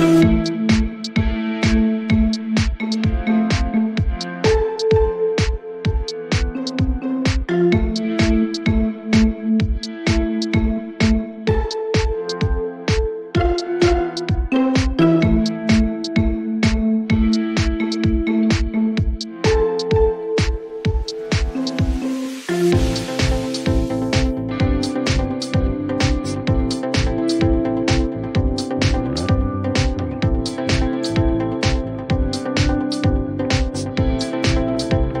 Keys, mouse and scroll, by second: 0.6 scroll, 0.6 click, 2.5 click, 3.8 click, 4.7 typing, 7.4 click, 7.6 click, 12.4-14.3 drag, 17.0 click, 20.2 click, 24.0-27.2 drag, 28.3 click, 33.7-35.1 drag.